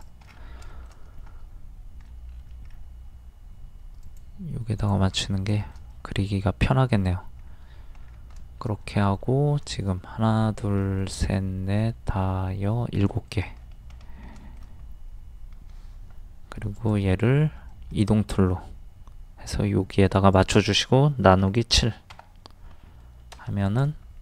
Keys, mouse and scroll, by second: 0.3-0.6 scroll down 1, 0.7 shift+middle click, 4.0 scroll up 1, 4.1 click, 5.2 scroll down 1, 5.6 shift+middle click, 7.0-7.4 scroll up 1, 7.6-7.9 scroll down 1, 8.4 middle click, 13.3 shift+middle click, 13.6-13.9 scroll up 1, 14.4 middle click, 16.8 ctrl+click, 17.7 shift+middle click, 20.1 click, 21.8 KP_7, 23.0-23.3 scroll down 1, 23.6 click.